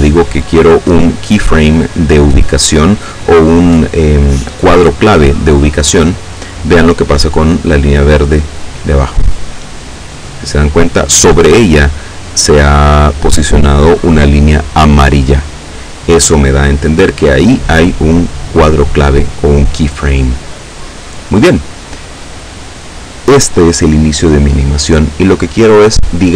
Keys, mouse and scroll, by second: 6.2 click.